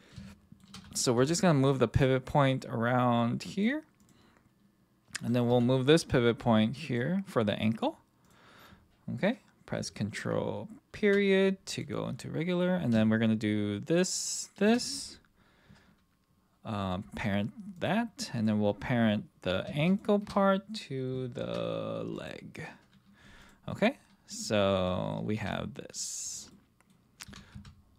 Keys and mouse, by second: 0.3-0.6 shift+middle drag, 1.2 g, 3.5 click, 5.5 g, 8.2 click, 10.9 ctrl+., 11.7 click, 17.0 ctrl+p, 18.4 click, 21.4 ctrl+p, 23.4 click, 23.7-24.5 middle drag, 24.9 middle drag, 25.4 r, 26.5 middle click, 27.2 r, 27.5 x.